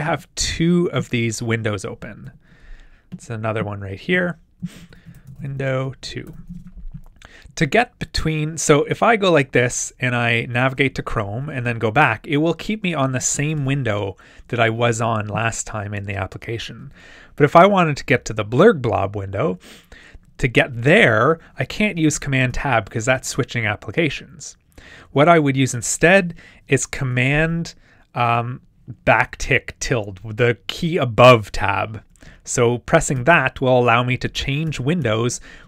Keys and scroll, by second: 2.2 super+n, 4.7-5.6 typing, 9.8 super+Tab, 13.6 super+Tab, 22.1 super+Tab, 33.2 super+`.